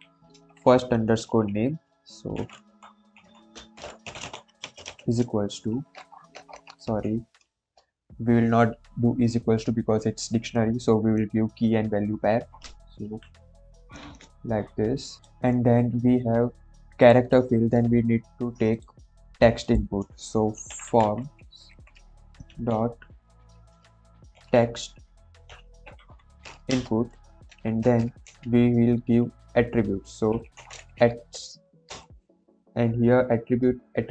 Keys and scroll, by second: 2.0-5.9 typing, 6.8 Right, 13.0 shift+;, 13.9 space, 20.4-22.4 typing, 24.3-28.0 typing, 26.6 Return, 28.2 Left, 30.0-31.1 typing, 31.8 Return.